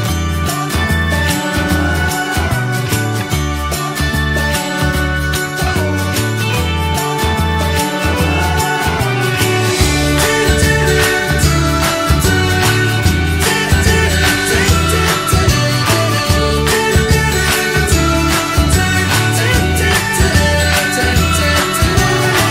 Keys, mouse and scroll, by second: 0.5-1.9 middle drag, 1.9-3.0 drag, 3.5-4.6 drag, 4.6-9.7 middle drag, 9.7 click, 10.5 click, 10.9 middle click, 11.8 click, 12.1-13.1 middle drag, 13.1 click, 13.7-15.7 drag, 15.7-17.0 middle drag, 17.0 click, 17.9-20.0 middle drag, 20.0 click, 20.4-22.5 middle drag.